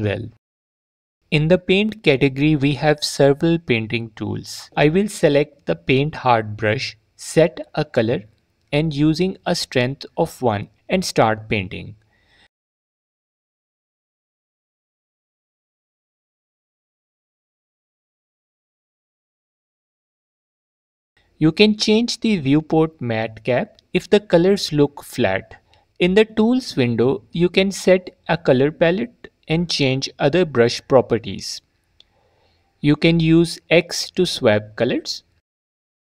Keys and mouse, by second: 8.2 f, 8.5 click, 11.7 middle click, 15.7 click, 16.1 middle click, 17.1 click, 18.0 click, 19.0 middle click, 21.0 middle click, 22.8-25.5 drag, 29.1 click, 30.0 click, 32.2 click, 34.0 click.